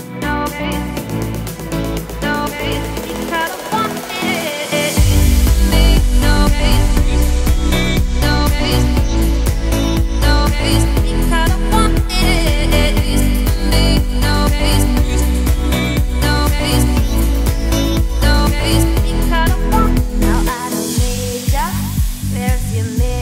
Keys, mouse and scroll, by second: 0.8 click, 2.0 click, 2.5-3.3 drag, 4.1 click, 5.1-5.5 scroll up 2, 5.7 click, 6.6 click, 9.4 scroll down 3, 9.5 middle drag, 9.8-10.1 scroll up 1, 10.1 `, 12.6-12.9 scroll up 2, 13.2 click, 13.6 Tab, 13.9 scroll down 1, 14.2-15.2 shift+middle drag, 15.2 a, 16.2 scroll up 2, 18.3 s, 20.7 scroll down 2, 20.9 middle click, 21.2 scroll up 1, 21.2 Tab, 21.6 click, 22.2 scroll up 3, 22.9-23.2 scroll down 1.